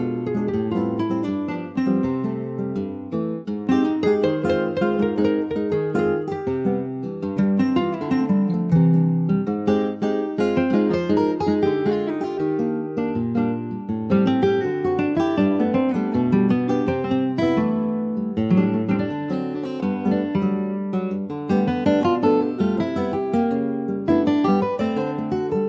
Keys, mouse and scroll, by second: 0.2-3.3 shift+middle drag, 3.3 click, 3.9-4.9 middle drag, 4.9 ctrl+s, 5.2 alt+middle click, 5.6 alt+middle click, 5.8-6.6 alt+scroll up 1, 6.6 middle click, 7.2-8.0 scroll up 1, 8.0 alt+middle click, 8.5 alt+middle click, 8.8 scroll up 3, 9.3 shift+middle click, 10.0 Tab, 10.5 middle click, 10.9 Tab, 11.6 ctrl+a, 12.7 Tab, 13.7 3, 13.9 click, 14.3 middle click, 14.9 ctrl+b, 20.8-22.2 middle drag, 22.2-24.3 drag, 24.3 middle click, 24.5-25.2 scroll up 2, 25.2 middle click.